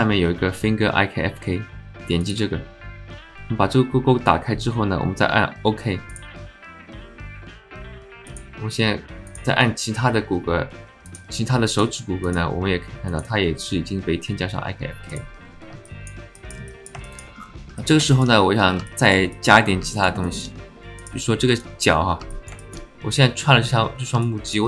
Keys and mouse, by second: 7.7 click, 8.2 click, 9.3-11.2 drag, 11.7 click, 13.1-15.2 drag, 15.9 alt+shift+middle click, 16.3 alt+shift+drag, 16.7 alt+click, 17.1 alt+shift+click, 17.8 alt+click, 18.1 alt+shift+click, 18.9 alt+click, 19.3 shift+click, 19.9 alt+middle click, 20.3 alt+shift+middle click, 21.0 click, 22.3 alt+shift+middle click, 24.2-24.6 alt+middle drag.